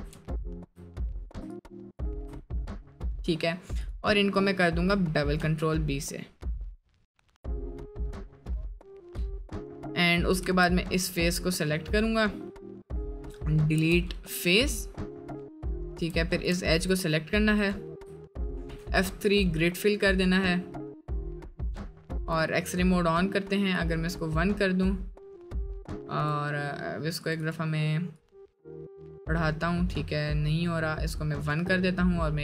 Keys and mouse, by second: 2.4 middle click, 4.1 middle click, 5.4 ctrl+b, 10.4 3, 11.7 middle click, 13.8 x, 15.9 1, 18.7 F3, 20.1 middle click, 22.8-32.4 middle drag.